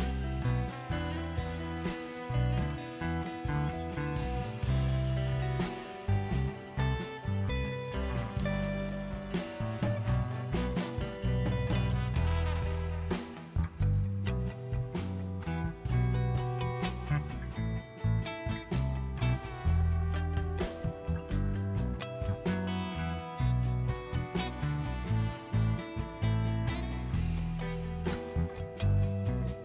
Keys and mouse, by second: 1.6 Tab, 3.9 click, 5.0 r, 5.1 z, 5.6 click, 5.7 e, 6.1 click, 6.5 click, 8.0 e, 9.0 r, 9.0 z, 9.4 e, 9.8 click, 9.9 Tab, 10.2 Tab, 10.8 ctrl+s, 11.2 alt+click, 11.6 ctrl+b, 12.1 click, 13.2 ctrl+b, 14.4 alt+click, 14.9 ctrl+b, 17.2 ctrl+b, 17.9 Tab, 19.9 ctrl+s, 20.6 click, 20.6 Tab, 21.5 ctrl+r, 22.2 click, 25.0 ctrl+click, 29.2 Tab.